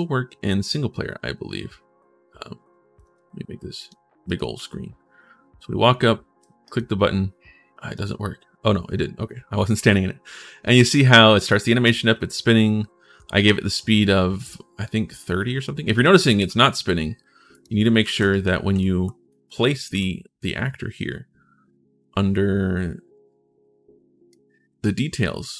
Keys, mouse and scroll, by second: 0.4 right click, 3.5 click, 4.1 right click, 4.3 w, 6.4 right click, 7.7 click, 11.6-13.5 typing, 15.4-16.2 typing, 17.3 click, 17.8 ctrl+shift+s, 18.0-19.7 typing, 18.1-19.1 right drag, 19.6 right click, 24.2-24.6 scroll down 1.